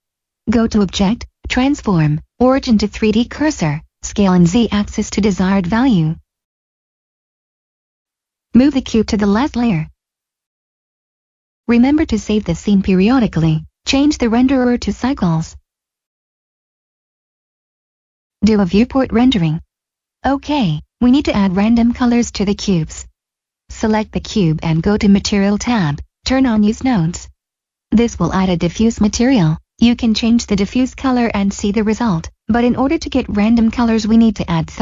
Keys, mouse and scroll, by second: 2.9 click, 3.3 s, 3.6 z, 6.9 click, 8.7 m, 10.7 click, 11.6 s, 11.7 click, 16.5 middle click, 17.9 click, 21.0 middle click, 23.6 click, 26.6 click, 30.5 click.